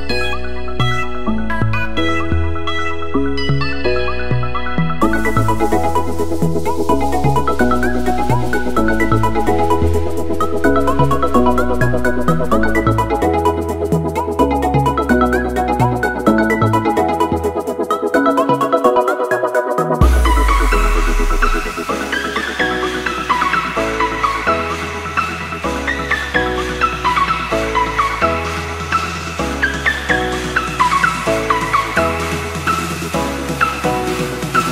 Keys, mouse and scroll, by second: 16.4 Delete, 18.1 click, 20.1 click, 22.0 Return, 23.2 alt+click, 23.7 Return, 26.0 click, 26.7 Return, 28.7 Return, 30.2 click, 33.1 click.